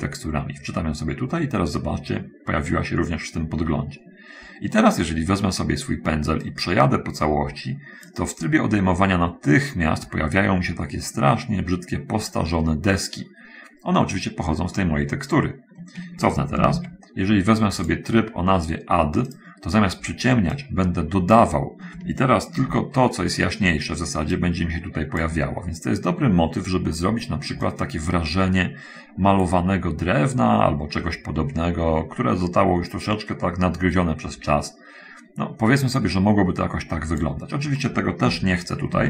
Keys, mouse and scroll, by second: 6.8-8.6 drag, 12.1-13.0 scroll up 1, 16.6 ctrl+z, 20.9 click, 22.8 ctrl+z, 23.4 ctrl+middle click, 24.5-25.6 drag, 28.0-37.7 drag, 38.5 ctrl+z.